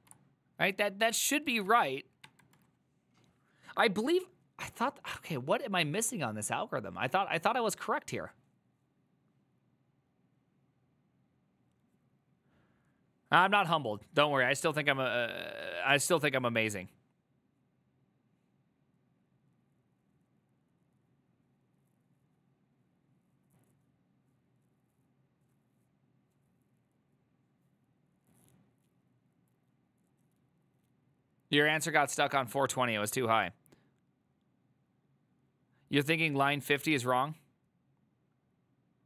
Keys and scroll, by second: 1.6 ctrl+a, 2.4 1.